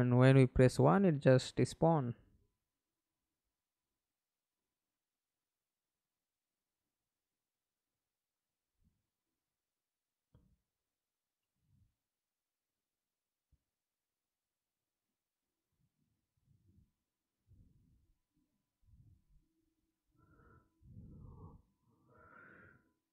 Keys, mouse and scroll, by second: 0.2 middle click, 1.0 F11, 3.9 right click, 6.8 right click, 11.6 right click, 12.1-15.4 scroll up 3, 20.4 w, 22.4 alt+click.